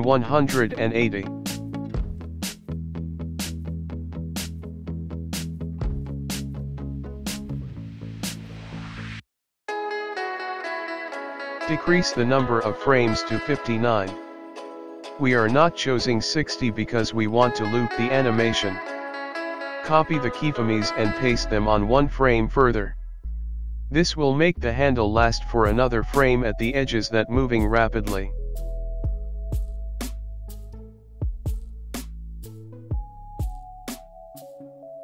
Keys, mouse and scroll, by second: 1.8 click, 2.0 click, 2.0 i, 2.0 space, 5.2 space, 6.0 click, 12.7 click, 16.9 click, 18.3 space, 22.2 click, 22.6 click, 23.6 click, 26.2 click, 26.8 ctrl+c, 26.8 ctrl+v, 27.1 click, 27.9 click, 28.2 ctrl+c, 28.6 click, 30.7 ctrl+v, 31.0 click, 32.2 click, 32.6 click, 33.2 space.